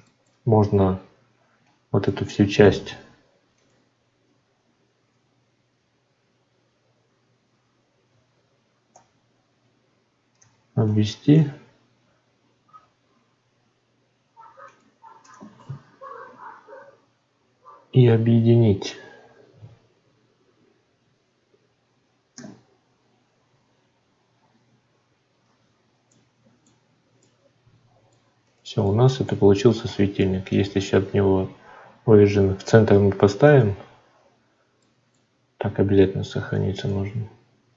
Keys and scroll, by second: 22.3 ctrl+j, 35.9 ctrl+s.